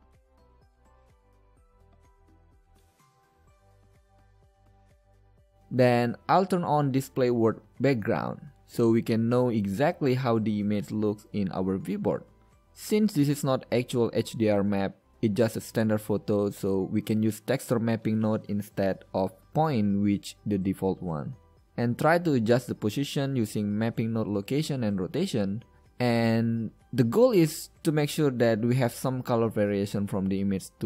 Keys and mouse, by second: 1.3-2.8 drag, 4.1 n, 7.3-8.7 drag, 8.7 n, 9.2-10.0 drag, 10.3 KP_5, 16.3-18.1 middle drag, 19.8-21.0 middle drag, 23.7-26.3 middle drag, 27.9-30.0 middle drag, 30.3 click, 30.3 middle click, 30.5 click.